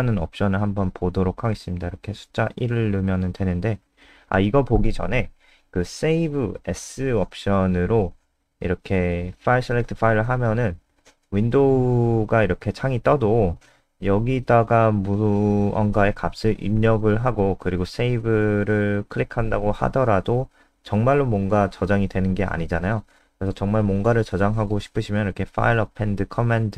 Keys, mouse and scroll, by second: 0.0-0.6 typing, 2.9 1, 4.9 ctrl+z, 7.3 s, 9.1 Escape, 9.5 Return, 11.1 ctrl+s, 12.0 F5, 14.8 click, 23.2 Return, 23.2-26.1 typing, 26.2 Up, 26.3 Up, 26.6 ctrl+Right.